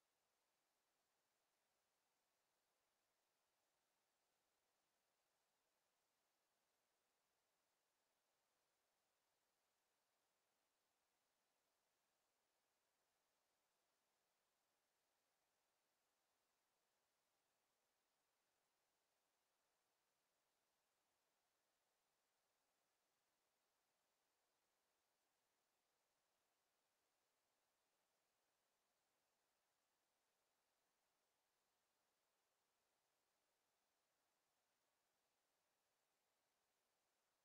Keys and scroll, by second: 6.2 ctrl+z, 11.3 e, 16.3 ctrl+z, 18.9 w.